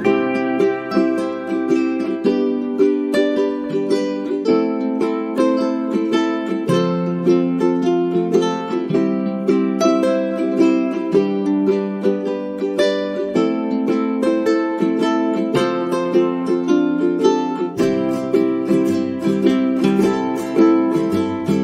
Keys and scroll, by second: 0.0-0.3 typing, 2.4 space, 3.9 space.